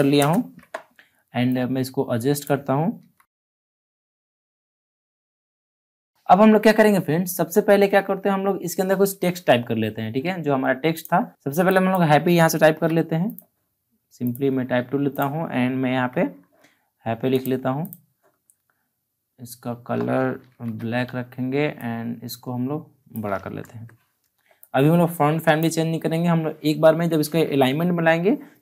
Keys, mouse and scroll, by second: 0.7 Return, 1.4 click, 1.4-2.9 drag, 2.9 ctrl+t, 3.4 click, 4.1 Return, 4.3-6.1 drag, 10.9 click, 12.6 ctrl+c, 13.2 click, 15.9 ctrl+v, 17.3 click, 20.3 ctrl+t, 21.7-23.6 drag, 23.6 Return, 24.5 click, 24.6-28.6 drag.